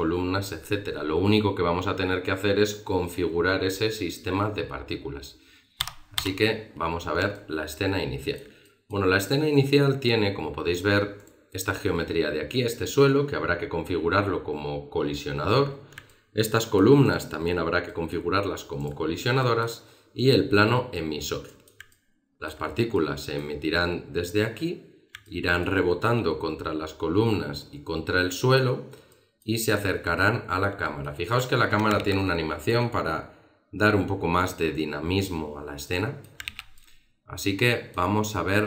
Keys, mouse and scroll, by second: 6.2 Escape, 7.0-7.3 scroll down 3, 7.3 alt+middle click, 8.6 middle click, 9.1 scroll up 1, 9.7 middle click, 11.2 right click, 15.7-16.7 scroll up 3, 16.1 alt+middle click, 17.0 right click, 17.9 middle click, 18.8 right click, 19.1 scroll down 3, 19.3 middle click, 20.2 right click, 21.5 middle click, 21.9 alt+middle click, 22.9 middle click, 25.2 alt+middle click, 29.1 middle click, 30.1 alt+middle click, 30.8 middle click, 31.3 right click, 31.5-33.4 scroll up 2, 32.0 alt+a, 35.5-36.5 scroll down 3, 35.9 middle click, 36.5 alt+a, 36.7 alt+middle click.